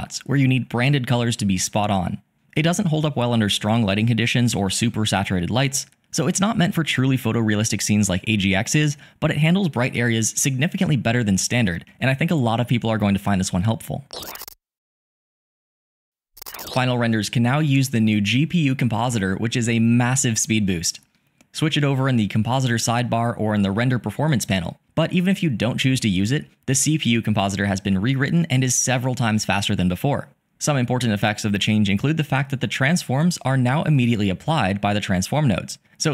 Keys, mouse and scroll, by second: 3.5 click, 5.0-6.1 drag.